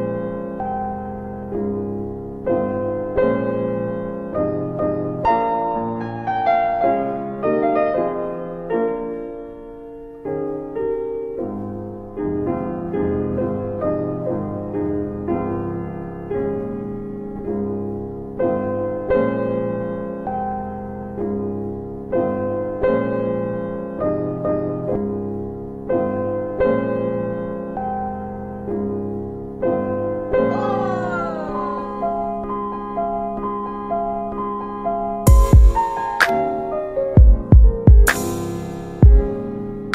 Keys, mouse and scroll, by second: 0.5 click, 1.5 middle click, 3.1 click, 5.3 click, 10.8 right click, 11.7 w, 13.4 click, 16.3 w, 18.1 middle click, 19.8 click, 21.1 typing, 26.5 w, 27.5 click, 30.2 ctrl+BackSpace, 31.4 middle click, 33.0 click, 33.2 middle click, 33.8 scroll down 1, 35.1 click, 36.5 alt+middle click, 38.9 shift+click.